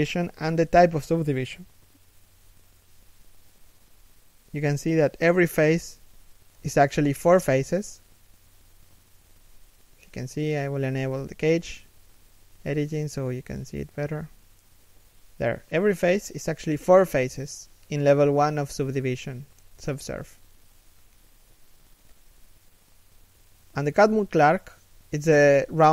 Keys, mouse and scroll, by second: 4.4 z, 7.9 scroll down 1, 8.3 middle click, 17.2 scroll down 1, 17.4 KP_3, 17.9 KP_1, 18.4 shift+middle click, 19.7 scroll down 1, 20.4 shift+middle click.